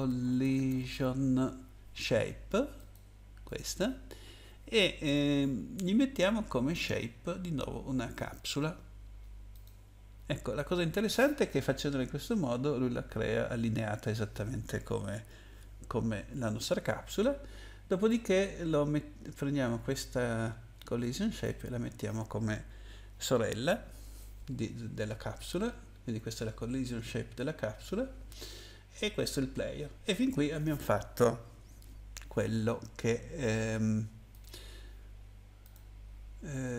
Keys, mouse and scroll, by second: 0.0-1.4 typing, 2.7 click, 3.4 click, 3.6 click, 6.7 click, 9.5 click, 18.1 click, 34.3 click, 35.6 click.